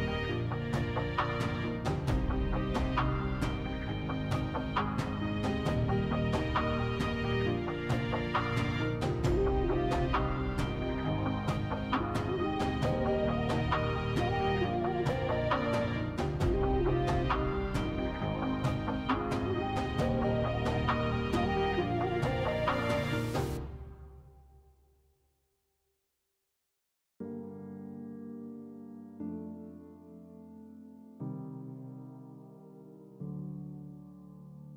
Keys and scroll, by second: 1.3 3, 2.8 5, 7.5 s, 9.1 s, 12.8 s, 14.6 s, 19.4 s, 23.3 s, 24.2 s, 27.7 3, 33.6 s.